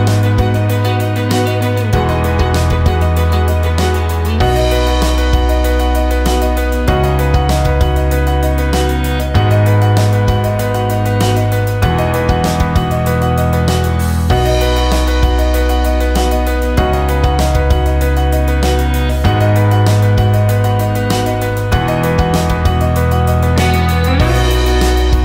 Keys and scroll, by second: 3.9 space, 6.9 ctrl+shift+e, 17.5 ctrl+z.